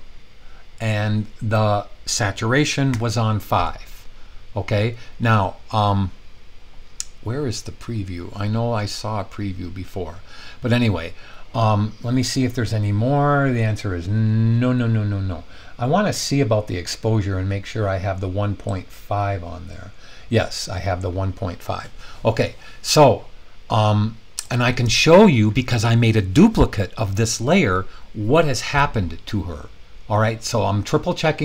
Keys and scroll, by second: 2.9 5.